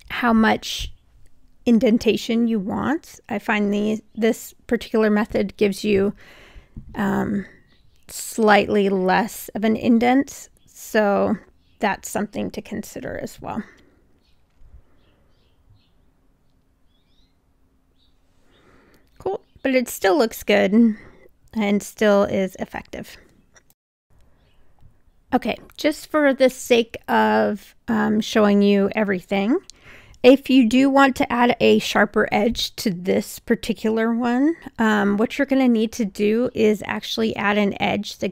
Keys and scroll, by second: 1.2 r, 8.5 w, 21.1 3.